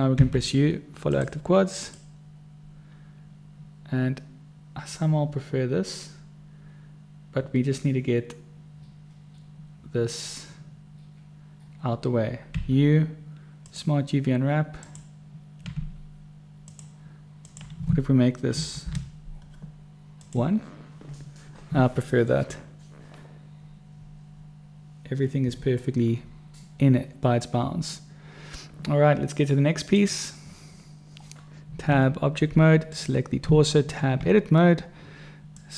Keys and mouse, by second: 0.5 u, 12.9 u, 16.1 u, 30.3 click, 32.2 Tab, 33.8 Tab.